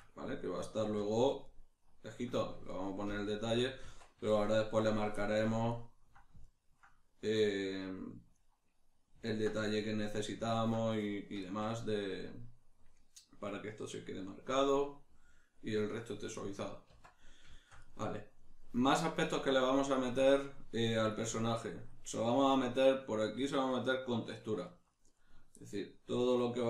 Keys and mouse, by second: 3.8 Tab, 4.3 shift+middle click, 16.9 Tab, 17.5 shift+middle click.